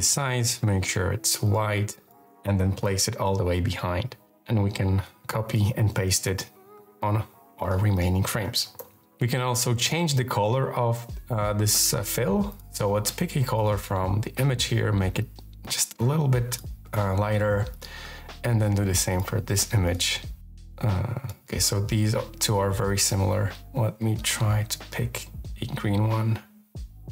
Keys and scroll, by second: 0.3 v, 2.6 alt+super+[, 4.5 super+c, 5.6 super+v, 6.0 alt+super+[, 8.3 super+v, 8.6 alt+super+[.